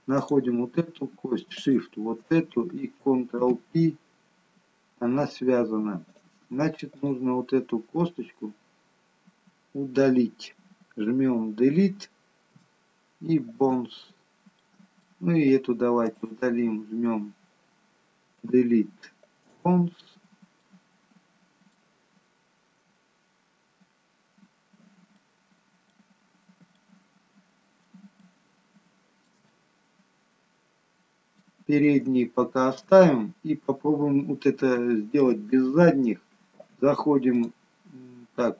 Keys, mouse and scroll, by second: 0.3 click, 1.6 shift+click, 3.6 ctrl+p, 6.9 click, 12.5 Delete, 14.1-14.5 scroll down 1, 14.5 middle click, 16.1 click, 18.4 Delete, 20.3 scroll up 1, 20.6 middle click, 24.5-25.1 scroll down 3, 25.1 middle click, 27.2 middle click, 27.2 scroll down 1, 28.2 shift+middle click, 29.4 middle click, 29.4 scroll down 1, 32.3 shift+middle click, 33.1-33.9 scroll up 4, 34.8 middle click, 37.3 click.